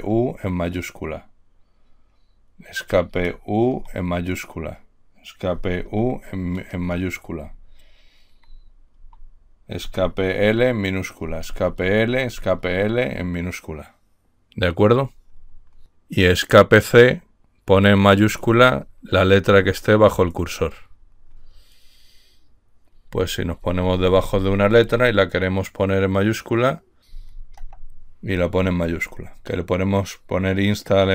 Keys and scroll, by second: 0.2 u, 3.2 Escape, 4.0 u, 5.5 Escape, 6.1 u, 7.5 Left, 8.1 Left, 8.3-8.7 Left, 9.1 Right, 9.8 Escape, 10.6 l, 11.2 Escape, 11.8 l, 12.3 Escape, 12.6 l, 23.6 Left, 23.9 Left, 24.1 Left, 24.2 Left, 24.4 Left, 24.6 Left, 24.8 Left, 25.0 Left, 25.2 Left, 27.4 Escape, 27.9 c, 29.3 Right.